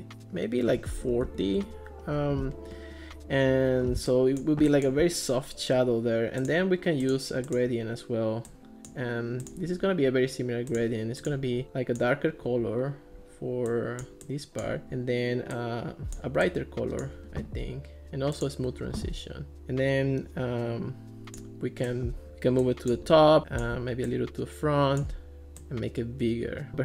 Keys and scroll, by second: 0.0-1.9 typing.